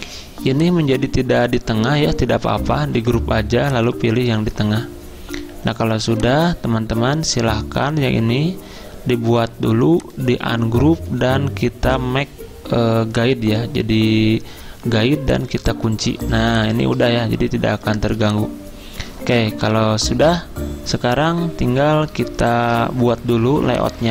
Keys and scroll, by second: 2.8 ctrl+g, 16.2 z.